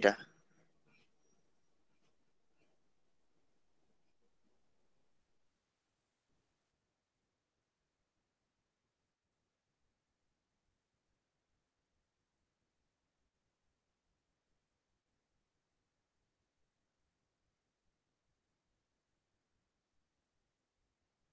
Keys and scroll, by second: 15.2 a, 17.4 p, 18.0 Delete, 19.3 Return, 19.4 space, 19.6 v, 20.0 e.